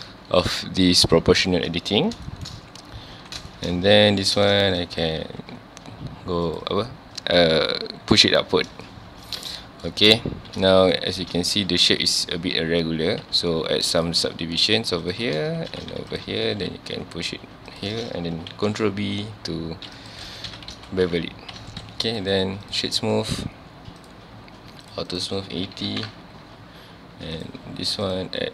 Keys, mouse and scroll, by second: 1.4 scroll down 1, 2.3 shift+middle click, 2.6 scroll up 1, 3.1 a, 3.5 shift+middle click, 3.8 scroll up 1, 3.9 1, 4.4-4.8 scroll down 1, 4.8 click, 5.2 g, 6.6 click, 8.6 scroll down 1, 8.9-10.4 shift+middle drag, 9.9-10.2 scroll up 1, 10.4-10.7 scroll down 1, 10.7 shift+middle click, 11.0 scroll up 1, 11.6 alt+a, 12.3-13.0 scroll down 1, 13.2 ctrl+r, 15.1 click, 15.3 scroll up 1, 15.9 ctrl+r, 17.8 click, 18.5 ctrl+b, 20.1 click, 20.3 alt+a, 20.5 Tab, 20.7 alt+a, 21.6 ctrl+s, 22.1 click, 22.3-24.0 right drag, 24.0 click, 24.8 click, 25.1 click, 26.0 KP_Enter, 27.4 click, 28.0-28.5 drag.